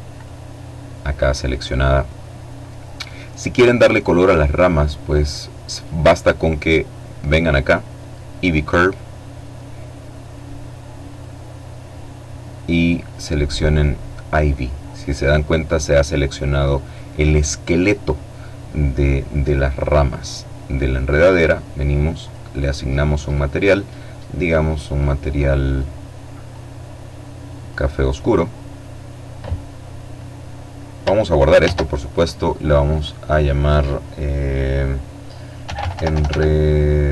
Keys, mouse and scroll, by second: 2.9-3.7 scroll down 1, 7.3-8.0 scroll down 1, 9.6 click, 10.3-10.9 scroll down 1, 11.6 click, 12.3 click, 18.1-19.3 drag, 19.9 click, 20.8 click, 22.0 click, 23.0-24.8 drag, 25.0-26.7 drag, 30.2 ctrl+s, 31.5 click, 34.2-34.8 typing, 35.9-37.1 typing.